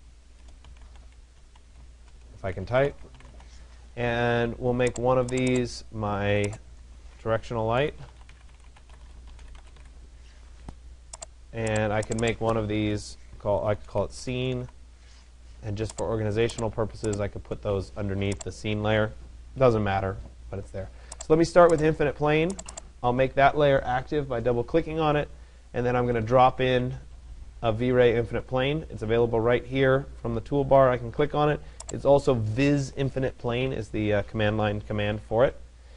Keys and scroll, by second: 0.0 BackSpace.